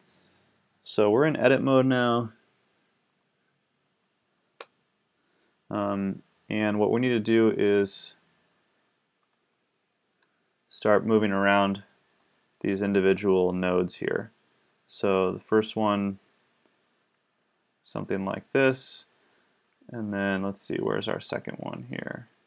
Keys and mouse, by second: 4.5 a, 14.0-15.9 drag, 21.0-22.3 middle drag.